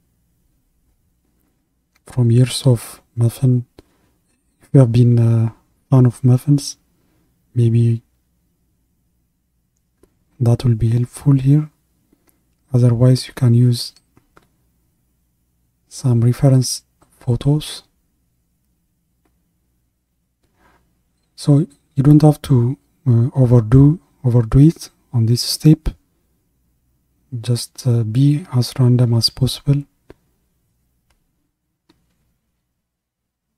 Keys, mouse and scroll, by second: 1.3-16.8 drag, 16.8-20.1 middle drag, 20.1-23.1 drag, 23.8-29.0 drag, 29.0-29.5 scroll down 2, 29.5-32.9 middle drag, 32.9-33.5 drag.